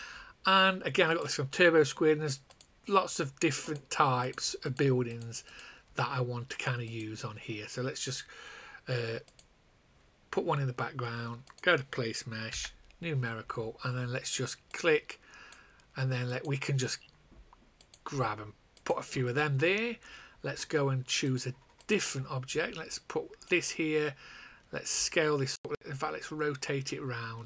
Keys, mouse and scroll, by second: 5.4 click, 12.4 n, 14.7 click.